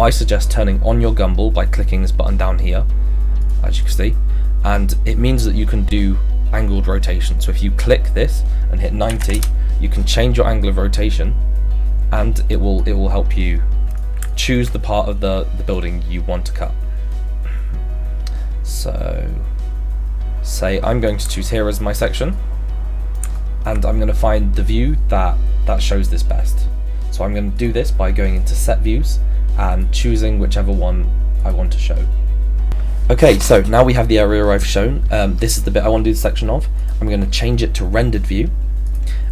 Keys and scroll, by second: 8.9-9.7 typing.